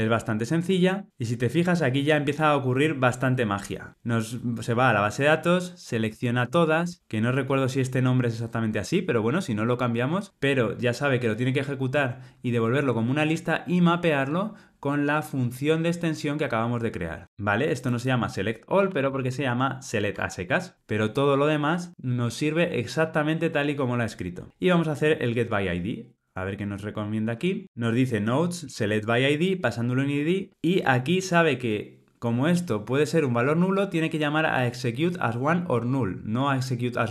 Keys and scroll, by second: 17.2 Tab, 20.1 Tab.